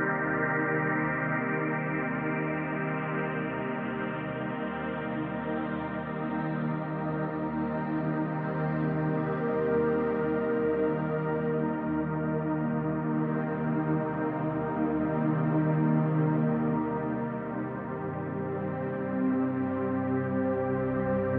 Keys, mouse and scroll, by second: 0.0 click, 0.2-6.9 middle drag, 2.7 Tab, 3.6 scroll up 2, 4.7 scroll up 2, 5.7 Tab, 6.9 click, 7.2 middle click, 7.7 click, 8.1 middle click, 8.8 click, 10.1-11.4 middle drag, 11.4 click, 11.7 middle click, 12.7 click, 14.0 scroll down 1, 14.2-21.3 shift+middle drag, 14.7 Tab, 14.8 scroll down 1, 15.5 scroll up 1, 16.5 KP_1, 17.3 z, 19.9 scroll down 1, 20.3 scroll up 2, 21.1 Tab.